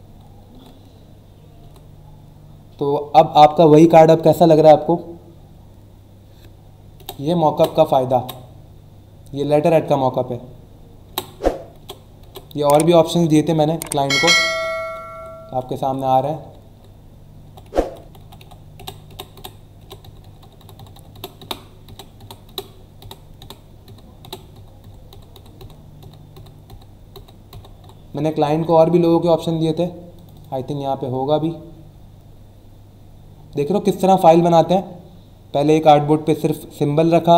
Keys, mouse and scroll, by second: 0.5 Right, 7.0 Left, 11.0 Left, 28.7 click, 30.1 click, 32.2 scroll down 1, 32.7 scroll down 1, 33.3-33.8 scroll up 2, 37.1-37.3 scroll down 2.